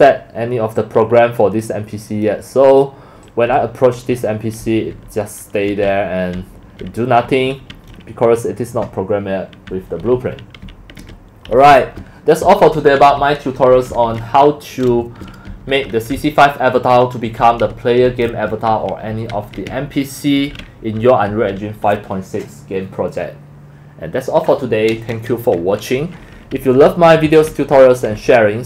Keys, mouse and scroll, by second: 1.0 click, 1.8 drag, 2.7 click, 3.3 click, 3.5-7.7 typing, 9.2-21.4 typing, 13.1 click, 26.3-28.6 typing.